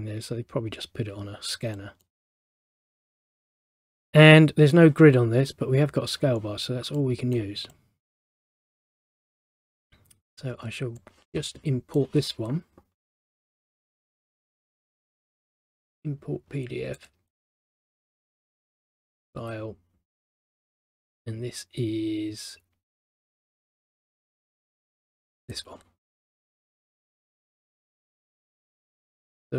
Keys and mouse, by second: 1.9 middle click, 7.1 middle click, 11.1 click, 14.6 click, 17.1 click, 18.5 right click, 19.3 click, 25.5 click, 27.3 click.